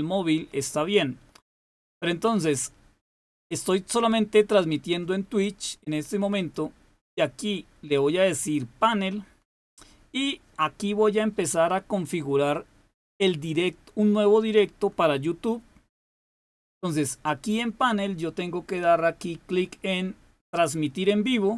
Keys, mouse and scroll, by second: 6.3-7.3 drag.